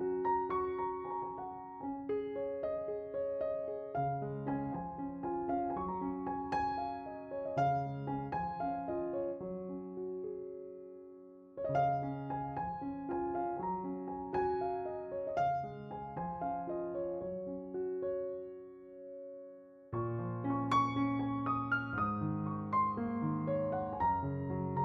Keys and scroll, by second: 8.6 alt+e, 8.8 3, 16.0 s, 21.2 s.